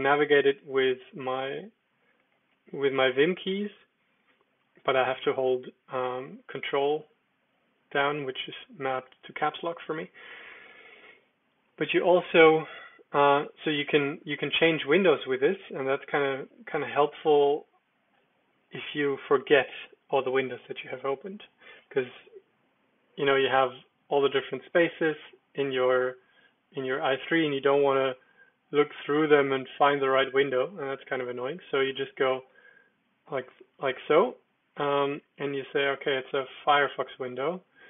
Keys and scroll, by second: 0.0 ctrl+j, 0.2 ctrl+j, 2.1 ctrl+k, 2.3 ctrl+j, 2.5 ctrl+k, 2.6 ctrl+j, 2.8 ctrl+k, 2.9 ctrl+j, 3.2 ctrl+j, 6.8 ctrl+k, 11.6 j, 16.1 ctrl+k, 16.2 ctrl+k, 16.3 ctrl+k, 16.5 ctrl+k, 20.7 Escape, 23.8 super+0, 24.6 super+1, 25.1 super+2, 27.5 super+3, 27.8 super+1, 28.2 super+1, 28.3 super+9, 28.8 super+4, 28.9 super+8, 29.2 super+1, 29.5 super+2, 32.5 super+d, 35.8-36.8 typing, 37.3 Down, 37.5 Down, 37.7 Down.